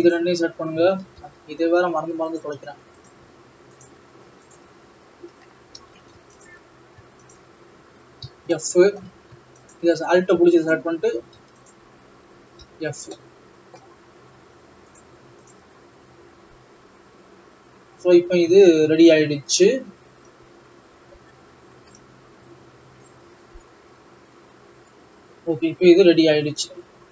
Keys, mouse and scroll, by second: 4.9 n, 5.4-5.7 scroll up 2, 6.8 alt+a, 7.8 alt+click, 9.0-10.0 middle drag, 10.0 alt+a, 10.5 click, 11.0 click, 11.8 alt+click, 13.0 f, 13.1-13.5 scroll down 2, 13.5-15.0 middle drag, 15.0 scroll up 1.